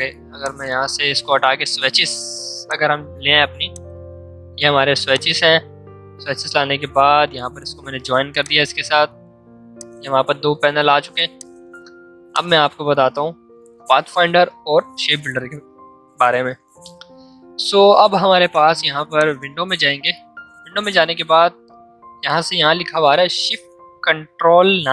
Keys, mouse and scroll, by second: 0.3 click, 2.6-19.1 drag.